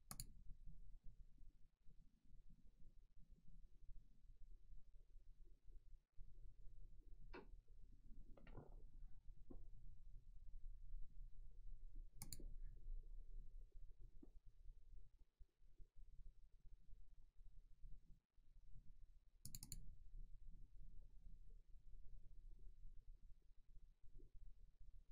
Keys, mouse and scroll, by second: 0.2 click, 12.3 click, 19.5 click, 19.7 double click.